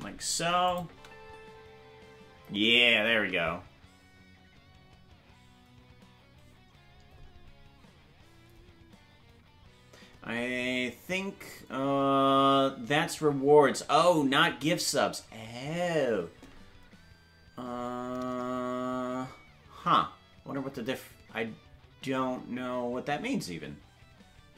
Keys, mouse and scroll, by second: 0.7 click, 0.8 space, 2.5 space.